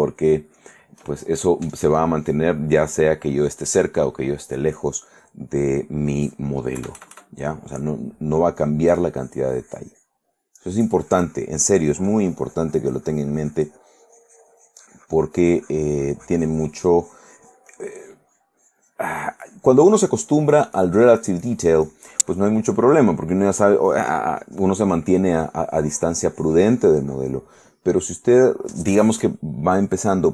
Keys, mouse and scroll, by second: 0.1-1.1 shift+middle drag, 1.3 shift+middle click, 7.0 KP_Add, 8.8-27.7 drag.